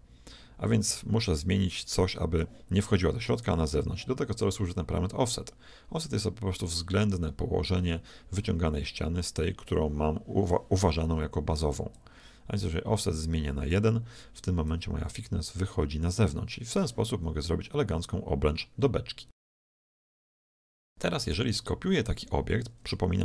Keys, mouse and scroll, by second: 11.9-13.7 drag, 14.7-16.7 drag, 17.1 z, 17.4-19.4 middle drag, 19.7-20.5 scroll up 1, 20.5-22.5 middle drag, 23.1 g.